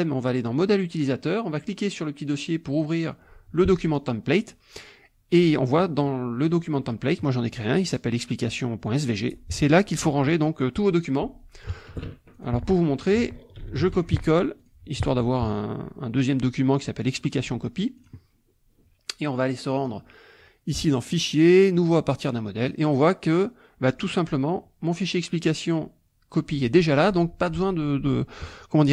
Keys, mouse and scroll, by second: 2.6 click, 3.9 click, 5.8 click, 9.1 click, 12.3 click, 13.6 ctrl+c, 13.8 ctrl+v, 14.1 ctrl+click, 14.6 ctrl+click, 18.0 click, 19.8 click, 21.1 click, 21.8 click, 22.2-23.9 drag.